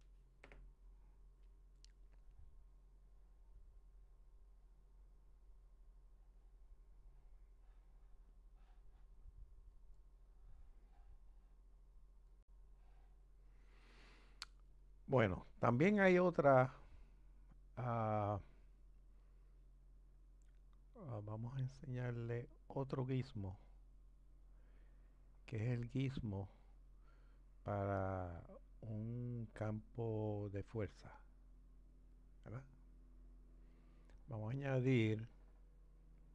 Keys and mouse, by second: 3.1-9.7 drag, 18.2-31.6 middle drag, 31.6 click.